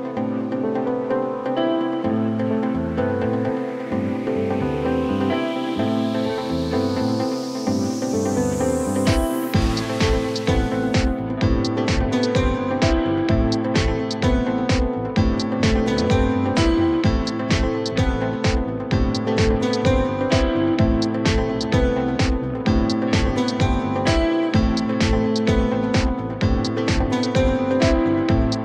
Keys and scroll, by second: 3.5 ctrl+shift+e, 5.2 4, 7.8 F4, 8.5 g, 10.2 F4, 11.5 F4, 12.6 F4, 18.6 Return, 21.9 Return.